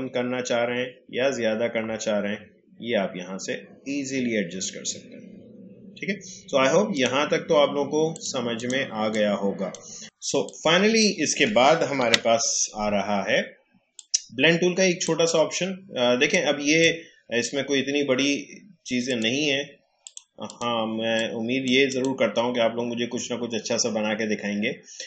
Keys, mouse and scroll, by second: 6.9-12.0 drag, 12.0 Delete, 13.9-21.9 drag.